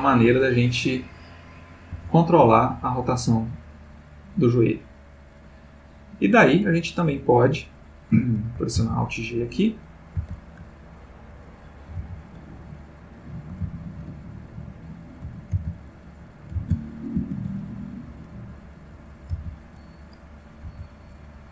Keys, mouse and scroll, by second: 0.5 click, 1.2 click, 1.9 g, 7.1 Escape, 8.8 alt+g, 10.1 alt+g, 11.3 click, 12.0 alt+g, 12.8 alt+click, 13.6 alt+g, 14.5 alt+click, 15.6 alt+g, 16.6 alt+r, 17.2 alt+s, 18.3 click, 19.3 alt+g, 20.1 alt+click, 20.7 g.